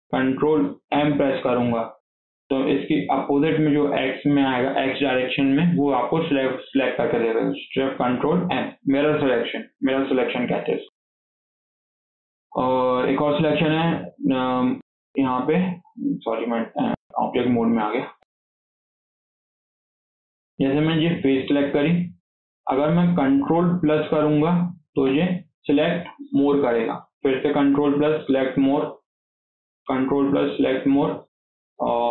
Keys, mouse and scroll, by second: 0.8 ctrl+shift+m, 7.0-7.5 scroll down 1, 7.5 scroll up 1, 7.9-10.4 shift+middle drag, 10.4 click, 10.7 Tab, 10.9-11.4 scroll down 3, 11.4 scroll up 2, 11.6 alt+z, 12.1-12.9 shift+middle drag, 12.9 scroll up 2, 13.1 shift+middle click, 13.3 click, 13.7-16.1 middle drag, 16.1 click, 16.5 middle drag, 16.8 Tab, 17.4 scroll up 2, 17.5 shift+middle click, 18.0 KP_4, 19.2 scroll up 1, 19.5 shift+middle click, 19.8-20.4 scroll up 2, 20.0 shift+middle click, 20.4 scroll down 2, 20.6 shift+middle click, 21.1 click, 24.8 ctrl+KP_Add, 27.5 ctrl+KP_Add, 28.6 scroll down 5, 28.8 middle click, 29.7 ctrl+KP_Add, 30.1 ctrl+KP_Add, 30.3 ctrl+KP_Add, 30.6 ctrl+KP_Add, 30.7 ctrl+KP_Add.